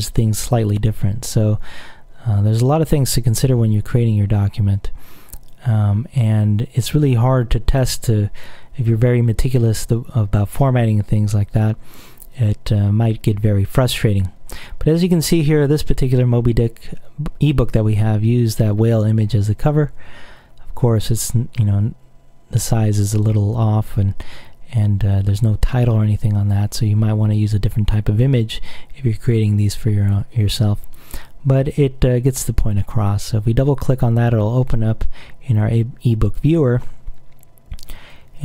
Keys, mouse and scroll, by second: 32.8 click, 35.8 click, 38.3 click.